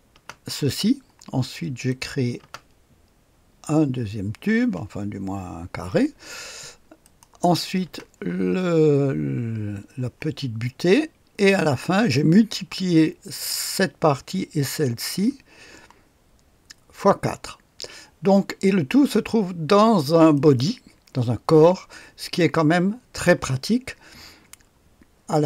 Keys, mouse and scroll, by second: 0.1 space, 1.8 click, 2.4 typing, 7.0 click, 7.8 space, 11.3 click, 15.2 space, 20.3 click.